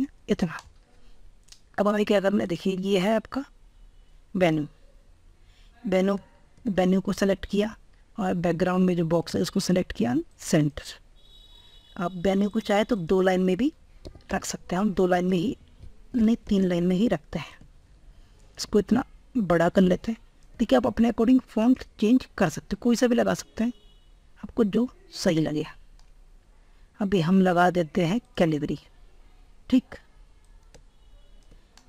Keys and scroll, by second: 15.2 ctrl+z, 16.5 ctrl+space.